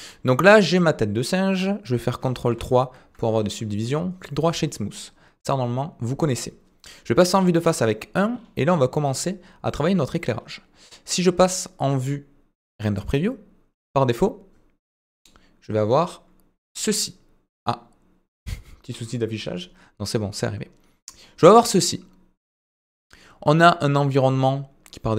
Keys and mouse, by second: 1.4 middle click, 4.1 right click, 17.4 click.